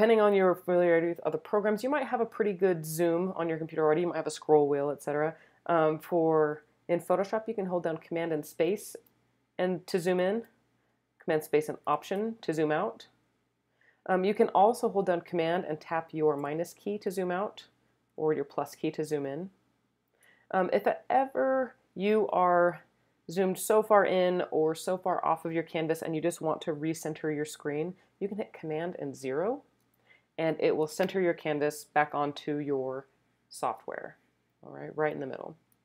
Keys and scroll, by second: 8.6 super+space, 9.9 space, 11.6 space, 16.4 super+-, 17.8 super+-, 18.1 super+=, 19.0 super+=, 29.2 super+0.